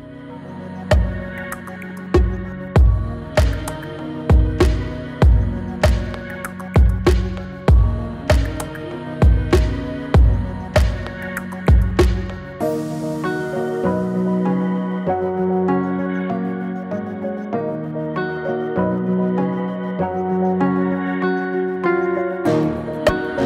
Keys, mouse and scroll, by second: 4.8 right click, 5.8 click, 7.6 space, 13.6 space, 14.8-20.1 drag, 21.9 alt+click.